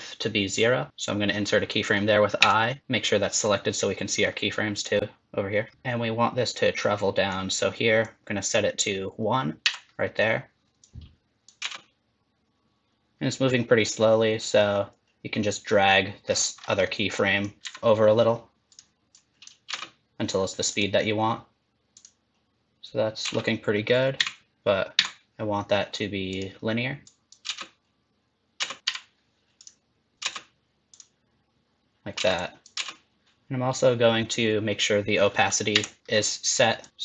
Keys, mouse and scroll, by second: 3.3 click, 4.7 click, 5.7-7.3 scroll up 1, 7.3 click, 8.0 click, 9.6 i, 10.8 click, 11.6 space, 13.1-13.4 scroll up 2, 13.1 KP_1, 13.9 click, 16.3-16.8 scroll up 7, 16.8 middle click, 17.4 click, 17.6 g, 19.1 click, 19.7 space, 20.7 click, 21.9-22.8 click, 23.2 space, 24.1 a, 24.9 t, 27.0 click, 27.5 space, 28.6 space, 28.8 click, 28.8 g, 30.1 click, 30.2 space, 30.9 click, 32.2 space, 32.3 click, 32.7 space, 35.7 i, 36.8 click.